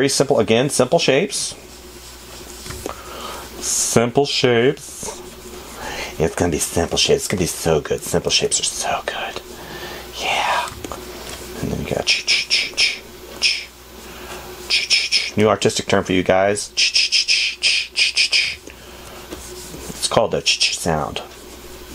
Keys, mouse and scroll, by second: 3.1 space, 7.3 space, 11.0 space, 15.8 space, 18.9 space.